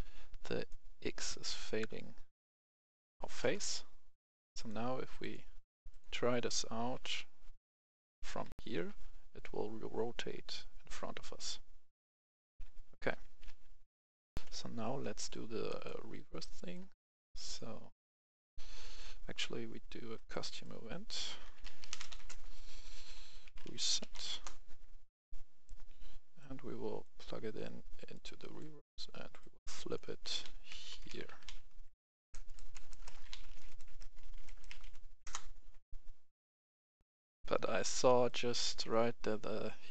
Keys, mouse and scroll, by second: 0.5 space, 0.7-3.5 drag, 6.1-8.0 typing, 12.0 d, 12.9 w, 13.1 a, 13.4 e, 14.3 Escape, 14.4 F10, 15.1 click, 15.6 right click, 16.3 scroll down 1, 16.4 right click, 17.4 click, 17.8 right click, 18.5 scroll down 1, 18.7 right click, 19.2-20.1 scroll up 1, 20.1 right click, 21.4-22.1 typing, 22.2 Return, 23.4-24.1 typing, 24.3 Return, 25.1-28.4 drag, 28.4 right click, 29.3-31.4 drag, 30.2-34.6 typing, 35.2 Return, 36.4 click, 37.0 F10, 38.2 click.